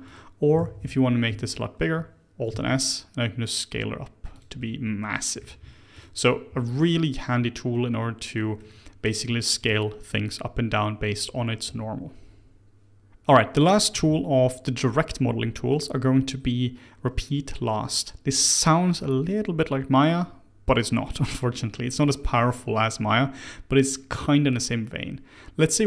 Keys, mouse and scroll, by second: 0.0 click, 0.6 alt+a, 1.3 a, 2.5 alt+s, 4.6-5.9 middle drag, 5.9 click, 6.2 scroll down 2, 6.5-9.7 middle drag, 12.9 ctrl+z, 23.3 click.